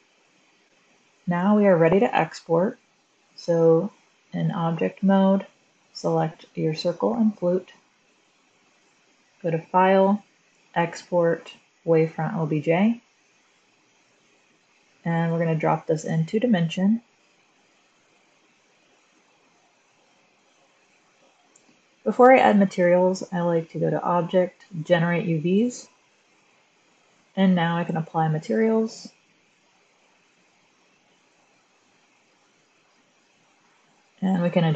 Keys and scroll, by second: 3.9 Tab, 5.5 Tab, 21.1 f.